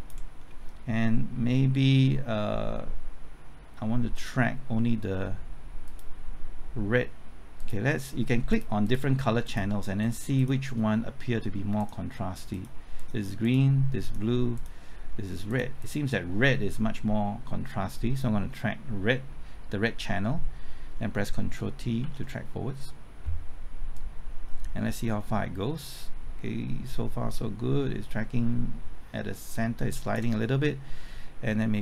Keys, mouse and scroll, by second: 0.3-4.8 scroll down 1, 5.8 click, 21.3 typing, 22.0 ctrl+t, 23.9-31.8 drag.